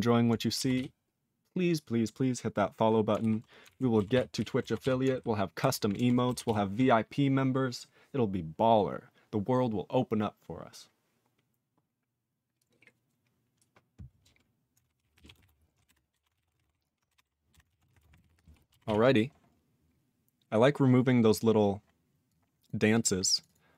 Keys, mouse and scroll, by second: 0.7 ctrl+s, 3.2 ctrl+alt+b, 3.6 ctrl+alt+f, 4.1 ctrl+s, 4.3 ctrl+e, 4.8 ctrl+s, 5.6 ctrl+alt+b, 5.9 ctrl+alt+f, 6.4 ctrl+s, 15.1 ctrl+a, 15.3 ctrl+space, 15.4 ctrl+e, 15.4 ctrl+n, 15.8 BackSpace, 16.1 BackSpace, 16.3 ctrl+a, 16.4 ctrl+n, 16.5 ctrl+space, 16.5 ctrl+e, 16.6 ctrl+n, 17.1 BackSpace, 17.2 BackSpace, 17.5 Delete, 17.7 ctrl+a, 17.8 ctrl+p, 17.9 ctrl+e, 18.1 ctrl+g, 18.2 ctrl+e, 18.2 ctrl+p, 18.9 ctrl+s, 19.5 scroll up 3, 20.1-20.6 scroll down 4, 21.1-22.2 scroll up 7, 22.2 click, 22.6 click, 22.9 click, 23.0 click, 23.3 click, 23.4 click, 23.4 double click, 23.5 double click.